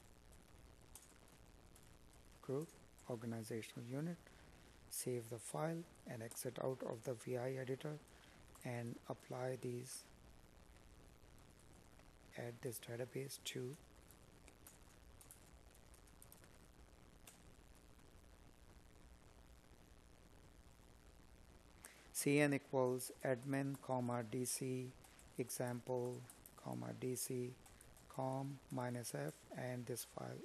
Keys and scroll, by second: 3.8 space, 6.6 space, 19.0 space, 19.5 space, 25.6 Up, 27.4 Right.